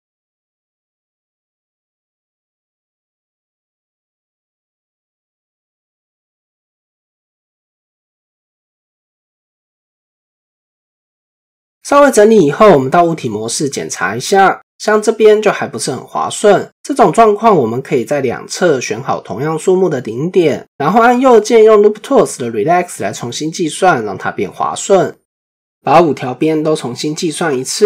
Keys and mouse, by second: 1.5 click, 8.0 alt+click, 10.5 click, 12.5 shift+middle click, 14.1 Tab, 15.7 Tab, 22.7-25.4 right drag, 27.1 click.